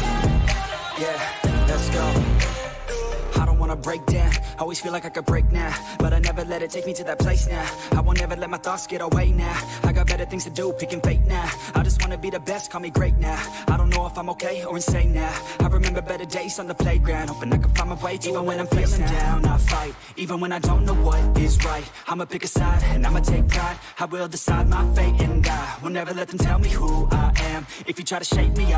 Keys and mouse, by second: 2.3 ctrl+v, 3.9-7.5 drag, 8.2 click, 10.6 ctrl+t, 11.7 ctrl+-, 13.5-19.1 drag, 21.7 ctrl+=, 23.9 click, 25.9 click, 27.1 right click.